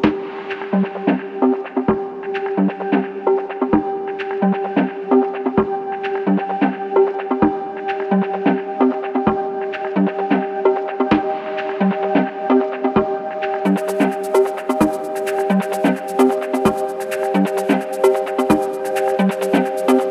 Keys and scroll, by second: 0.0-5.3 typing, 6.5 e, 7.2 q, 8.7 d, 9.2 space, 9.3 o.